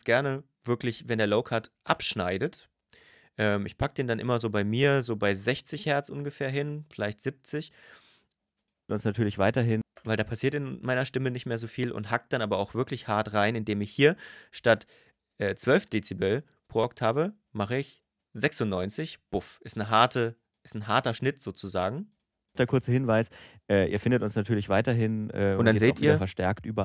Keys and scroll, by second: 8.6 space, 22.3 space.